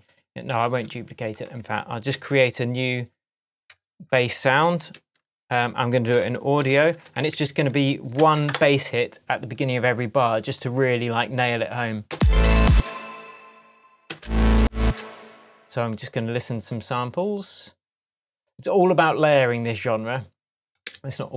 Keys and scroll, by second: 0.6 super+z, 2.1 shift+super+t, 3.7 BackSpace, 4.9 super+t, 6.1 super+r, 6.7 shift+super+r, 6.8 shift+super+b, 7.1 shift+a, 12.1 space, 14.1 space, 20.8 Right.